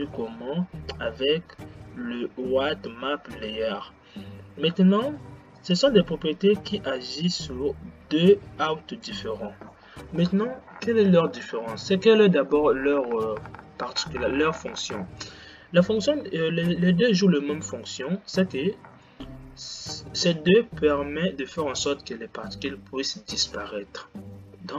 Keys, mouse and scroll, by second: 6.0-9.1 drag.